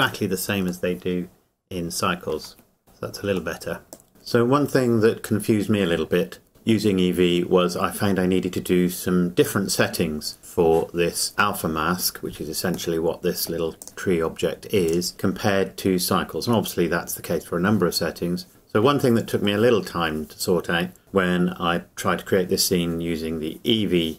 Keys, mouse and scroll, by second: 0.9 middle click, 2.8-3.6 scroll down 1, 3.6 middle click, 3.9 click, 13.0 middle click, 13.8 click.